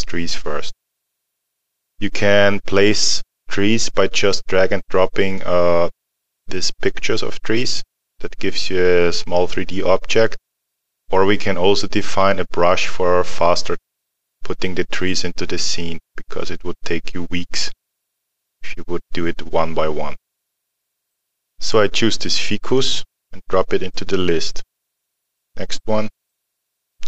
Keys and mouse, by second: 21.2 click, 22.8 click.